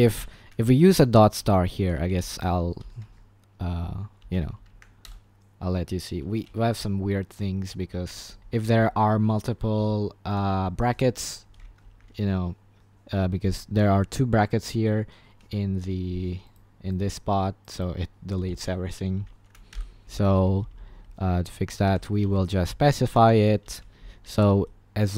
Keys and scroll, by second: 0.0-5.2 typing, 0.5 Escape, 8.1 typing, 8.1 shift+Page_Up, 8.7 shift+Page_Down, 9.7 shift+Page_Down, 11.9 Escape, 19.4-23.6 typing, 23.2 Escape.